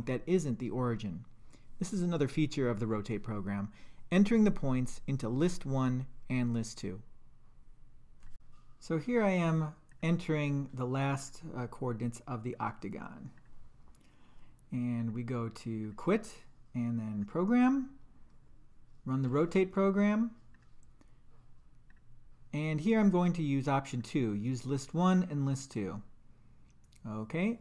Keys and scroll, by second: 8.3 Down, 9.0 3, 9.9 Return, 11.2 Right, 12.5 4, 13.4 Return, 19.2 5, 20.5 Return, 24.0 Down, 25.7 Return.